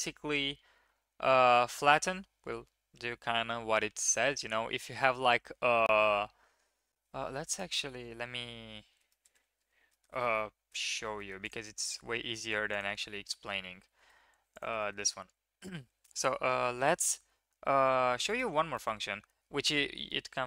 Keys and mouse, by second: 9.0 shift+click, 9.3 Tab, 9.9 shift+click, 10.1 drag, 10.8 shift+click, 11.1 click, 11.7 shift+a, 12.7 shift+a, 13.8 g, 14.8 shift+click, 15.0 Tab, 16.7-17.3 drag, 18.2-20.4 drag.